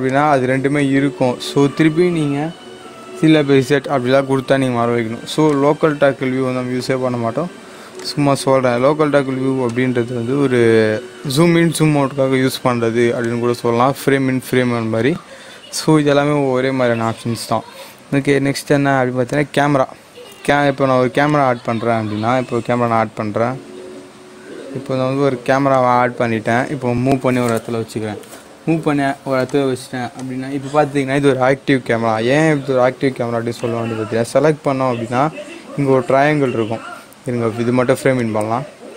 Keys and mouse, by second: 2.6 ctrl+z, 5.4-13.2 drag, 21.2 click, 22.8 shift+a, 25.6 click, 28.1 g, 29.5 click, 33.5 click, 38.1 click.